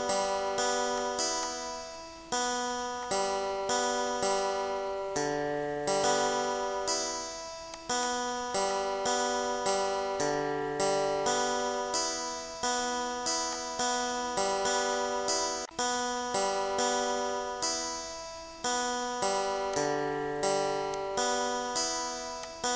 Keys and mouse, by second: 1.0 click, 3.0 click, 3.8 click, 4.6 click, 5.8 click, 7.8 click, 8.7 click, 9.7 click, 10.4 8, 10.8 Return, 13.6 click, 14.9 click, 15.7 click, 16.4 click, 17.9 click, 19.8 click, 21.0 click, 22.4 click.